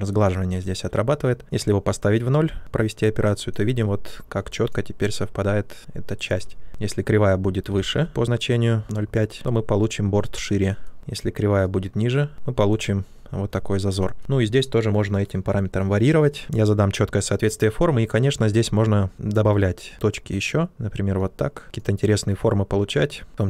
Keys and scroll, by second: 0.4 ctrl+z, 7.7 ctrl+z, 11.0 ctrl+z.